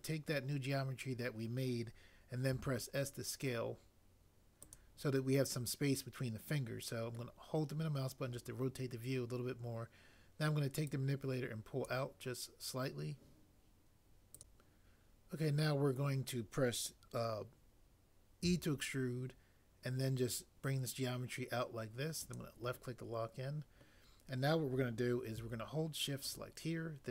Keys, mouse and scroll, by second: 2.5 s, 18.4 e.